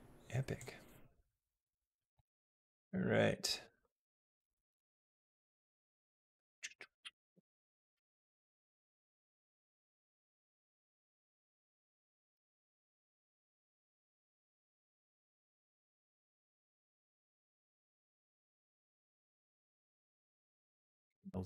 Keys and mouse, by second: 0.4-1.8 drag, 3.5 click, 3.6 space, 12.2 space, 13.0-16.4 drag, 17.5 g, 20.9-21.4 drag.